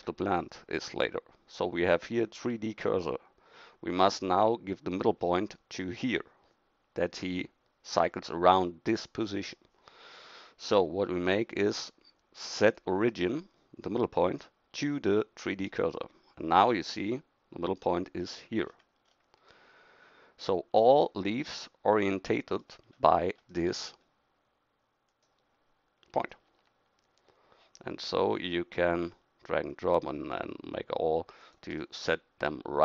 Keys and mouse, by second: 18.6-23.8 middle drag, 25.1-26.5 right drag, 26.5 g.